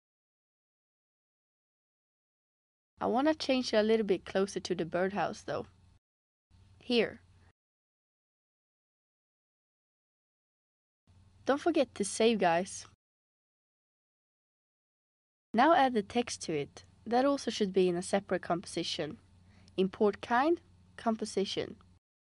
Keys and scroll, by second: 7.8 space, 10.1 space, 11.7 super+s.